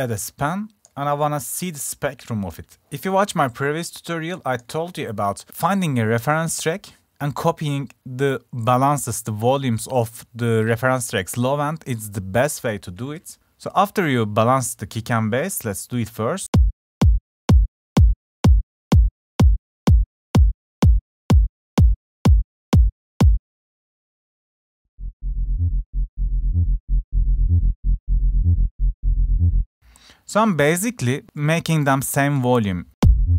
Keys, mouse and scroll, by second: 1.1-2.1 drag, 2.3-3.7 drag, 13.2 drag, 15.3 click, 19.7 click, 23.8 click, 29.5 click, 31.2-32.7 drag.